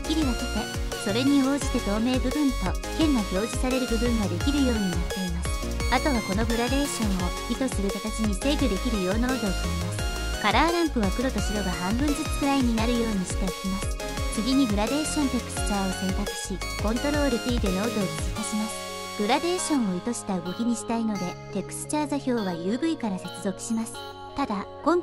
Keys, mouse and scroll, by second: 12.4-12.9 drag, 13.1 click, 14.4 click, 16.6 click, 17.3 ctrl+t, 18.4 click, 18.6-19.0 drag, 19.5-19.9 drag.